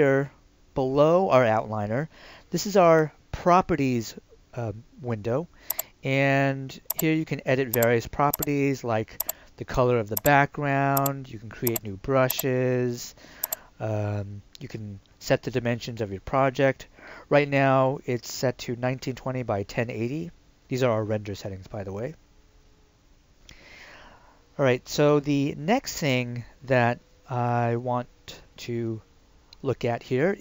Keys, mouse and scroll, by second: 5.7 click.